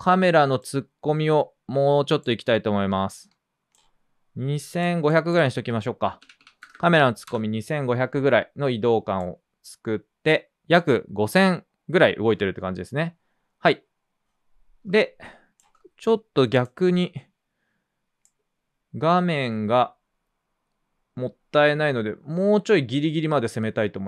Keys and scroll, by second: 5.9-7.2 typing, 7.2 Return.